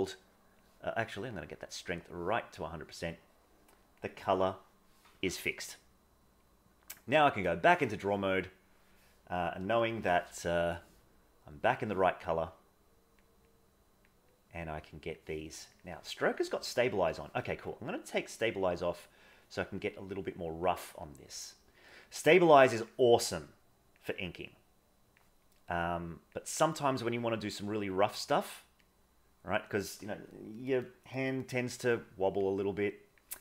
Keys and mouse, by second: 1.3 click, 2.5-3.9 drag, 5.6-7.4 drag, 8.2 right click, 11.6 middle click, 12.5 click, 13.5 click, 14.3 click, 15.8-17.2 drag, 17.9-19.3 drag, 19.8 click, 21.1 click, 22.4 click, 23.5 click, 24.3 click, 25.6 click, 26.7 click, 28.0 click, 28.9 click, 32.5 click.